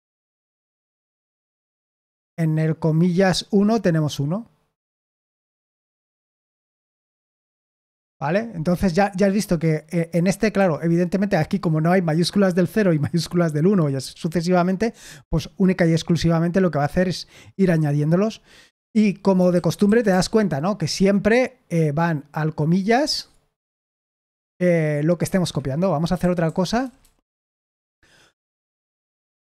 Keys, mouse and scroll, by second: 0.5-1.5 typing, 6.0-6.8 typing, 6.9 Return, 10.5 Escape, 19.5-20.6 typing, 25.3 Escape, 26.1-26.7 typing, 28.6 typing.